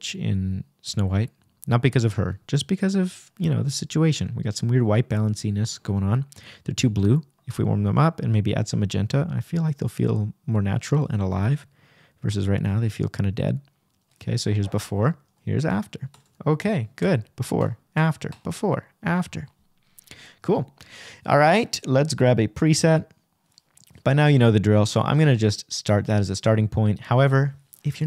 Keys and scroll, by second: 7.0 BackSpace, 7.7 super+BackSpace, 8.6 super+Return, 9.5 \, 11.9 Right, 24.6 shift+=.